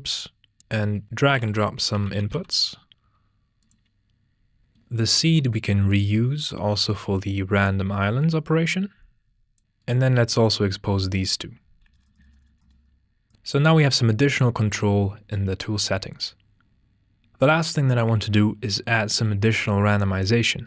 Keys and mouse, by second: 3.1-4.7 drag, 5.2 shift+d, 5.9 click, 11.8-13.3 drag, 14.0 click, 14.6 click, 15.9 click, 17.2 click.